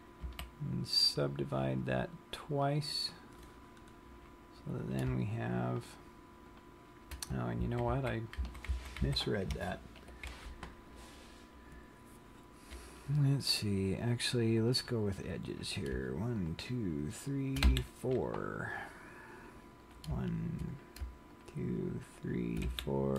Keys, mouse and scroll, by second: 0.6 w, 2.8 click, 4.1-5.2 scroll up 4, 5.2 click, 5.9 shift+click, 6.8 click, 8.2 super+z, 8.8 super+z, 9.0 super+z, 9.4 super+z, 9.8 super+z, 14.9 click, 15.8 click, 16.6 shift+click, 17.5 shift+click, 17.9 f, 19.3 scroll down 1, 20.1 click, 21.2 click, 21.6 shift+click, 22.4 shift+click, 23.0 f.